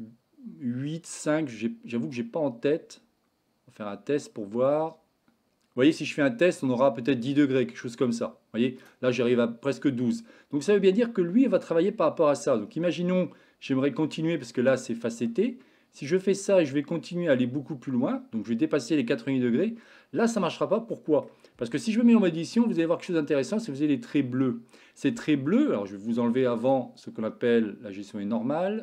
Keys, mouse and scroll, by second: 16.5-20.3 drag, 21.0 middle click, 21.9 Tab, 22.3 shift+middle click, 23.0 middle click, 26.7-28.8 drag.